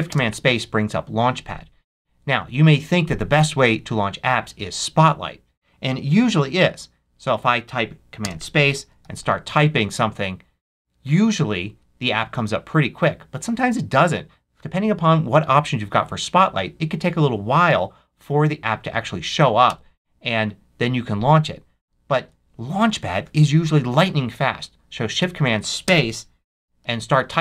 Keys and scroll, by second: 0.0 shift+super+space, 1.8 Escape, 8.7-9.9 typing, 19.6 Return, 22.1 super+q, 25.8 shift+super+space, 26.4 shift+super+c, 26.7 a, 27.1 l.